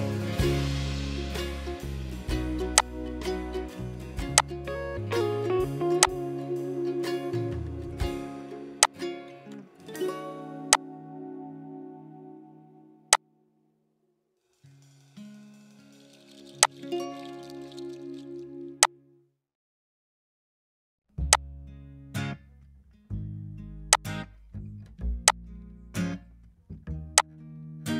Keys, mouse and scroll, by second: 10.7 shift+click, 14.5 ctrl+right click.